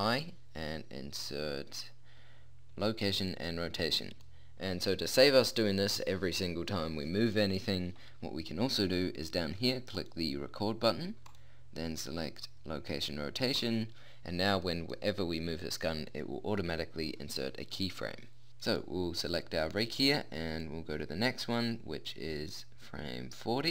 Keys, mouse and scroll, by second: 0.0 i, 10.0-13.1 drag, 14.7-16.1 middle drag, 18.7 right click.